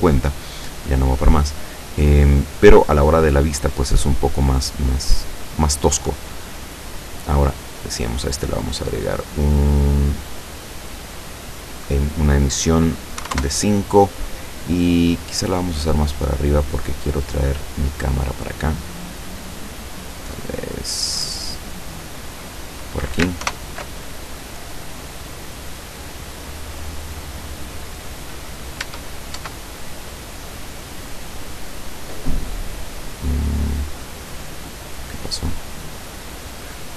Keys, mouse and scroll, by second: 5.0 right click, 6.2 click, 7.2 click, 8.0 click, 9.1 click, 11.0 click, 12.2 click, 13.2 5, 13.3 Return, 14.6-15.5 scroll down 2, 15.6 middle click, 16.3 scroll up 2, 16.3 middle click, 16.6-17.4 drag, 18.4 middle click, 18.6 scroll up 2, 19.2-22.4 middle drag, 22.4 scroll up 2, 23.5 ctrl+alt+KP_0, 25.3 right click, 25.9 right click, 26.7 right click, 27.2 right click, 28.9 Tab, 30.1 right click, 30.6-31.8 scroll down 4, 32.5 right click, 33.4-33.7 scroll down 1, 33.7 middle click, 34.3 scroll down 2, 34.9 scroll down 2, 35.5-36.5 middle drag, 36.8 scroll down 2.